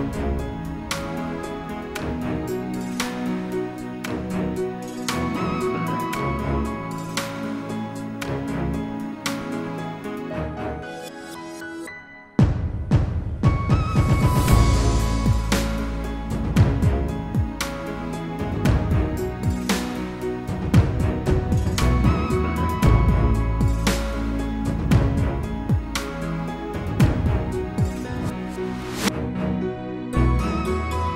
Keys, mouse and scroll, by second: 1.8 F4, 3.2 F9, 7.0 F4, 10.2 click, 10.9 F4, 15.3 F9, 16.1 click, 16.8-17.2 scroll down 1, 17.2-17.7 scroll up 1, 17.7 click, 20.2 click, 21.2 click, 22.6 click, 23.8 click, 25.8 click, 26.8 click, 27.8 1, 29.1 8, 30.1 click, 30.9 1.